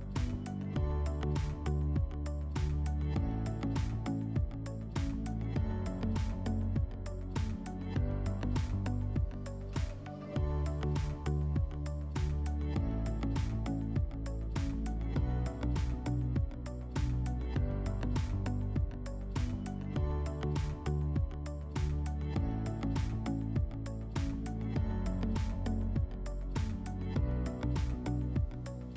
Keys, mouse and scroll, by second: 5.3-6.9 drag, 7.4 /, 12.8 /, 16.1-17.7 middle drag, 17.2 r, 20.9-22.5 drag, 21.9 w, 24.3-25.9 drag.